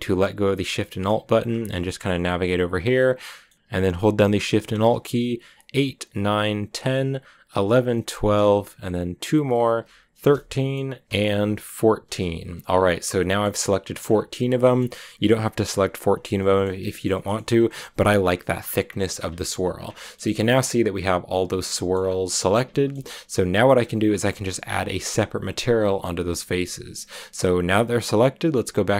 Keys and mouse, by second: 0.9 middle click, 1.7 shift+middle click, 3.2 click, 6.1 alt+shift+click, 6.6 alt+shift+click, 8.0 alt+shift+click, 10.2 click, 11.5 ctrl+alt+shift+z, 13.2-14.6 drag, 16.7 shift+click, 17.0 click, 19.2 shift+middle click, 19.8 shift+middle click, 21.1 middle click, 21.6 shift+middle click, 22.6 shift+middle click.